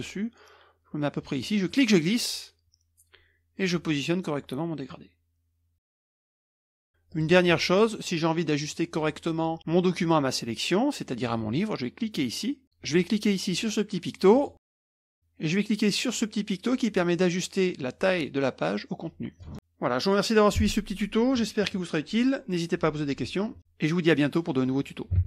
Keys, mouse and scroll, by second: 1.7-3.9 drag, 4.9-6.1 drag, 6.2 KP_Subtract, 6.3 KP_Subtract, 6.4 KP_Subtract, 7.1 click, 8.0-8.6 middle drag, 12.0 click, 12.6 click, 14.3 click, 19.4 click, 25.1 Tab.